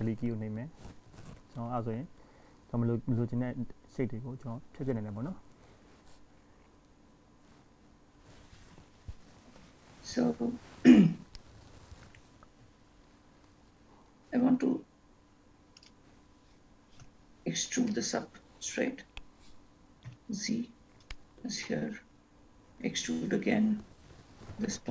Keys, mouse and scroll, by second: 1.2 s, 3.5-4.3 scroll down 2, 4.9-5.9 scroll down 3, 5.9-6.3 scroll up 2, 6.3-8.3 scroll down 2, 9.2-9.7 scroll up 4, 9.9-11.6 scroll down 1, 11.6 e, 17.2 ctrl+z, 18.0 e, 23.0 e.